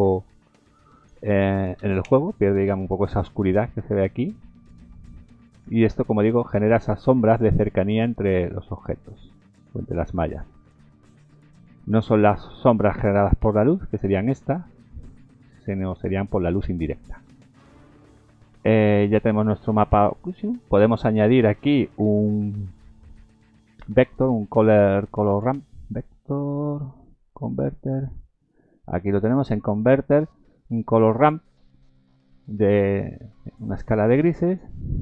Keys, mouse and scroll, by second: 1.0 click, 4.1-4.6 scroll down 2, 4.9-5.3 scroll up 1, 5.7 scroll up 2, 7.3-8.0 scroll down 2, 19.2-19.9 scroll down 3, 32.7-33.3 scroll up 2.